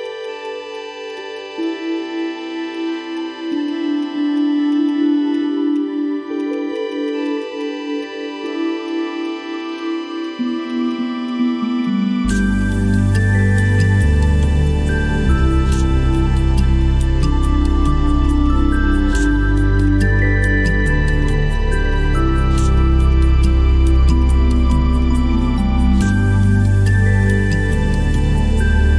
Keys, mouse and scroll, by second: 0.1 shift+click, 1.2 shift+double click, 1.4 shift+click, 3.5 shift+click, 4.9 double click, 6.4 shift+click, 6.5 shift+double click, 8.9 shift+click, 11.3 ctrl+click.